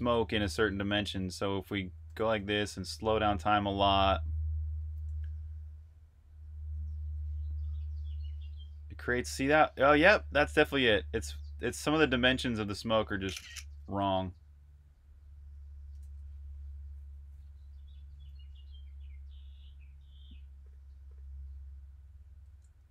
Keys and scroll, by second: 1.0-3.0 typing, 12.9 shift+super+3, 15.8 super+q, 21.8 shift+super+3, 22.8 super+_.